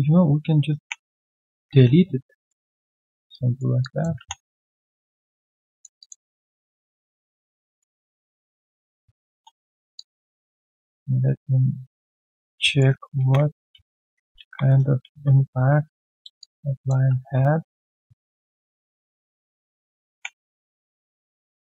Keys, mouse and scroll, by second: 0.8 ctrl+Delete, 2.4 alt+middle click, 2.8 alt+click, 3.3 right click, 3.8 alt+click, 4.1 typing, 5.3 alt+click, 5.7 alt+click, 6.3 alt+middle click, 6.5 alt+click, 7.4 alt+middle click, 7.6 alt+click, 8.6-9.3 typing, 9.6 scroll down 1, 9.9 alt+click, 10.7 alt+click, 12.6 alt+right click, 13.1 ctrl+z, 13.7 ctrl+z, 14.2 ctrl+z, 14.3 ctrl+z, 16.4 alt+click, 20.1 ctrl+Delete.